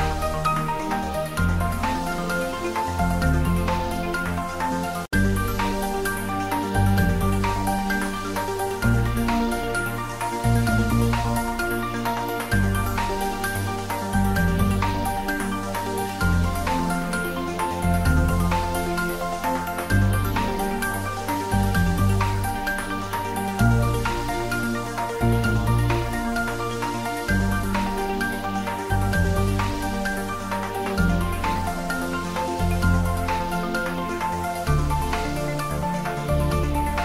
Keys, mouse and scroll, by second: 1.5 Tab, 2.3 click, 3.5 click, 3.9-5.7 typing, 4.0 click, 5.5 click, 6.6 click, 6.7 s, 7.4 click, 7.8 g, 8.3 x, 9.7 s, 10.8-11.7 typing, 10.8 click, 12.3 click, 12.8 ctrl+s, 14.0 click, 14.4 ctrl+s, 15.7 click, 18.3 ctrl+middle click, 18.8 ctrl+middle click, 19.1 shift+a, 19.4 shift+click, 19.7 shift+d, 20.2 shift+click, 21.2 shift+g, 21.4 shift+click, 23.2-24.6 shift+drag, 24.6 ctrl+s, 25.4 3, 25.7 ctrl+middle click, 26.2 middle click, 26.8 ctrl+middle click, 27.3 ctrl+s, 27.9 ctrl+middle click, 28.3 ctrl+middle click, 28.6-30.2 shift+middle drag, 30.6 click, 31.3 ctrl+t, 34.2 ctrl+shift+t, 34.3 shift+middle click, 34.7 middle click, 35.5 click, 36.1 shift+middle click, 36.9-37.0 drag.